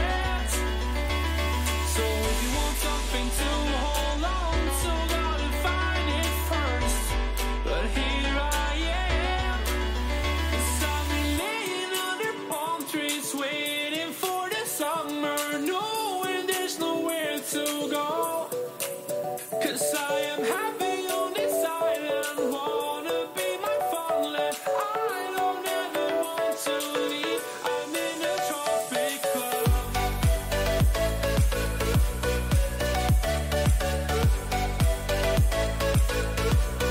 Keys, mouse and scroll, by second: 4.3 k, 7.8 k, 11.3-14.0 middle drag, 14.6-16.7 drag, 15.8-18.1 right drag, 16.2-18.1 middle drag, 18.1 KP_3, 19.7-21.3 middle drag, 22.0-23.2 drag, 23.2 KP_3, 23.6 click, 23.6 a, 25.4 b, 27.7 g, 33.9 a, 34.7-36.9 middle drag.